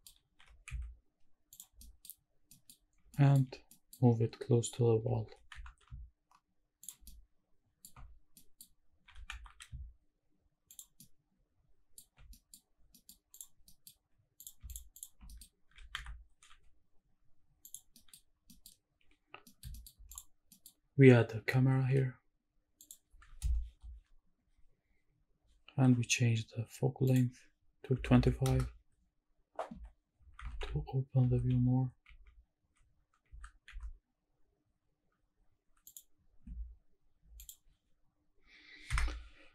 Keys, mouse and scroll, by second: 0.2 scroll down 1, 0.4 g, 0.7 z, 1.5 click, 1.8 middle click, 2.2 scroll up 2, 2.5 middle click, 2.8 scroll up 1, 3.1 shift+middle click, 3.5 scroll up 1, 3.7 middle click, 4.1-4.6 scroll down 2, 4.6 scroll up 1, 5.2 g, 5.5 x, 6.8 shift+drag, 7.0 shift+middle click, 8.0 scroll up 1, 8.3 middle click, 9.1 g, 9.3 x, 10.7 shift+click, 11.0 shift+middle click, 12.2-13.0 scroll down 3, 12.3 middle drag, 13.0 middle click, 13.3 click, 13.7 middle drag, 14.4 click, 14.7 shift+drag, 15.0 shift+click, 15.3 middle click, 15.7 g, 16.0 x, 16.5 y, 17.6 click, 18.0 middle drag, 18.3 scroll down 2, 18.5 middle drag, 18.8-19.4 scroll up 1, 19.4 shift+middle drag, 19.7 shift+middle drag, 20.1 click, 20.5 middle click, 21.5 shift+a, 23.7 ctrl+alt+KP_0, 24.5-26.0 scroll up 3, 27.1-28.5 drag, 29.7-33.7 typing, 35.8 click, 37.4-38.9 drag.